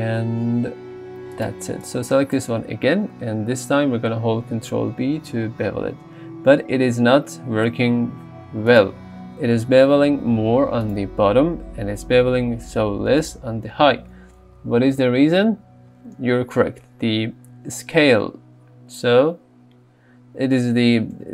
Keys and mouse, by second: 1.0 g, 1.4 click, 4.7 ctrl+b, 9.8 ctrl+b, 10.9-11.9 right drag, 12.3 ctrl+b, 14.4 Tab.